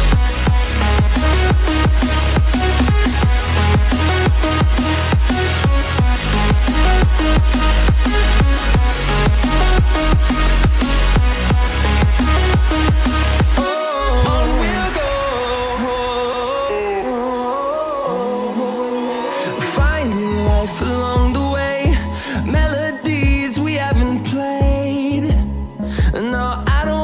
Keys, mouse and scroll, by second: 0.4 scroll down 1, 1.4 click, 4.1 double click, 6.1 click, 7.5 click, 8.2 ctrl+z, 9.0 ctrl+z, 10.0 click, 16.0 click, 16.6 scroll up 1, 18.5 click, 19.6 scroll down 1, 20.1 ctrl+c, 20.2-20.9 typing, 21.4 click, 23.6 click.